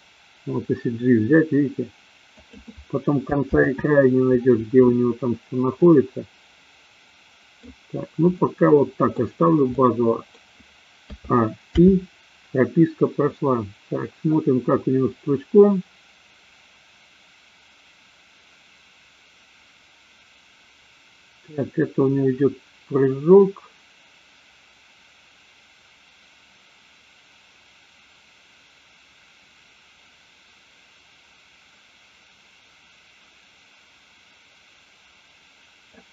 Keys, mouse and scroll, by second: 4.0 ctrl+z, 5.7-7.6 middle drag, 8.4-9.2 middle drag, 9.7 middle click, 11.1 a, 11.9 i, 13.5-36.1 drag.